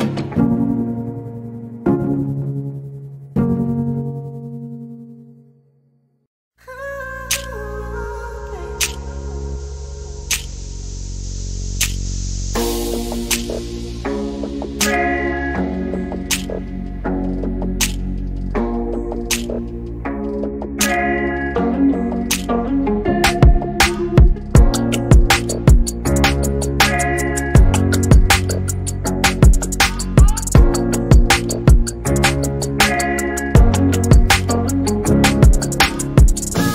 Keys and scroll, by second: 14.2-15.3 typing.